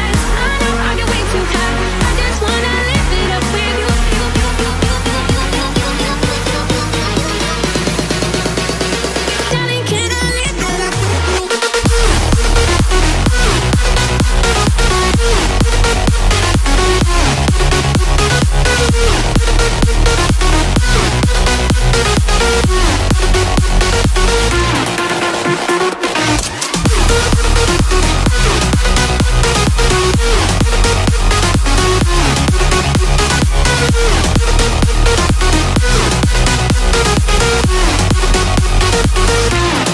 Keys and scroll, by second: 0.6 [, 3.5 [, 3.6 [, 8.9 [.